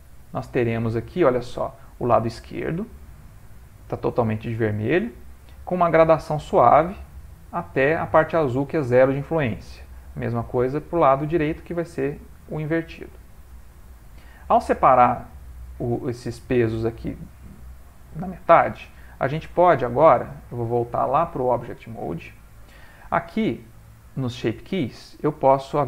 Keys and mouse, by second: 5.8 ctrl+middle click, 10.6 click, 12.6 ctrl+middle click, 13.1 middle click, 14.6 middle click, 14.7 ctrl+middle click, 19.5 middle click, 21.0 click, 23.4 middle click.